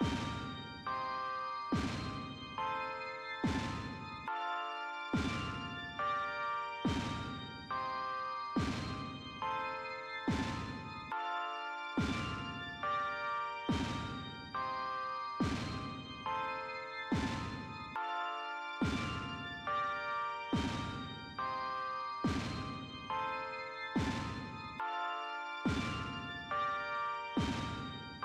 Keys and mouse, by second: 0.3 click, 2.6 click, 4.7 click, 12.3 shift+e, 20.0 click, 21.7 click, 27.7 click.